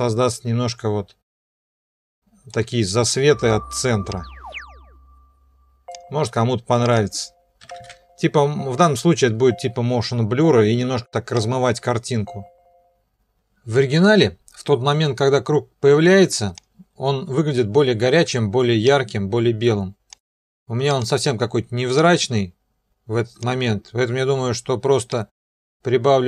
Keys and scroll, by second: 7.4-8.2 typing.